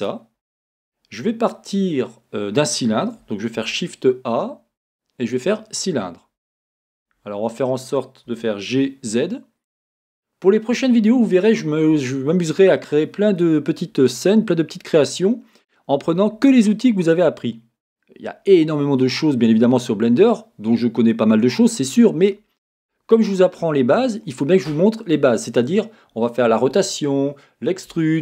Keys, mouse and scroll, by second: 3.6 shift+a, 5.9-6.8 scroll, 8.3 g, 10.9 click, 10.9 right click, 11.6-15.7 middle drag.